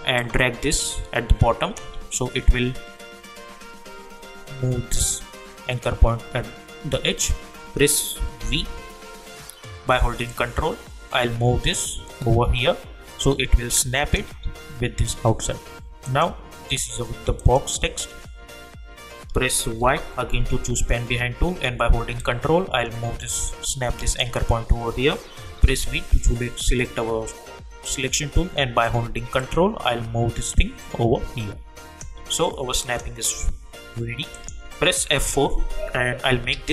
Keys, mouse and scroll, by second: 0.2-4.5 ctrl+drag, 8.4 v, 10.3-16.0 ctrl+drag, 12.3-14.3 ctrl+drag, 19.8 y, 22.2-23.6 ctrl+drag, 25.6 v, 29.0 v, 29.4-32.8 ctrl+drag, 35.0 F4, 36.5 ctrl+a.